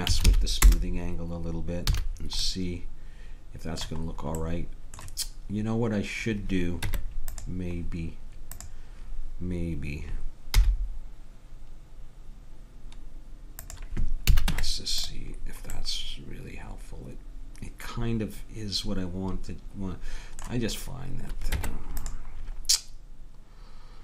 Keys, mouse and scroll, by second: 1.8 a, 2.4 middle click, 3.3-4.5 middle drag, 6.8 Tab, 7.8 Tab, 8.5-10.0 drag, 10.5 i, 14.3 a, 14.5 Tab, 21.6 Tab.